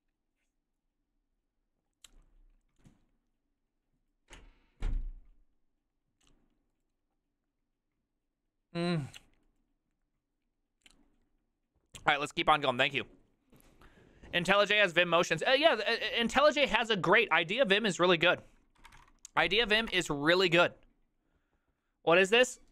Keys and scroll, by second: 19.3-20.4 typing.